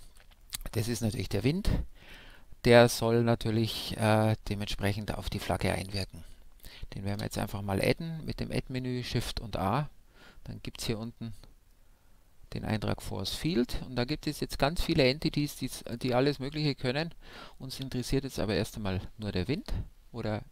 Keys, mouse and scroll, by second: 0.1 a, 0.4-6.5 middle drag, 7.1 shift+a, 20.2-20.5 middle drag.